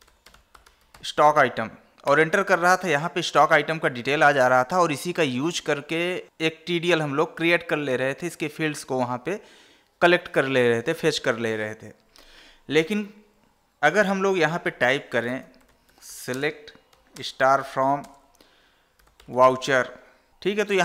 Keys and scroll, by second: 14.3 ctrl+n, 16.7 space, 17.5 space, 18.3 space.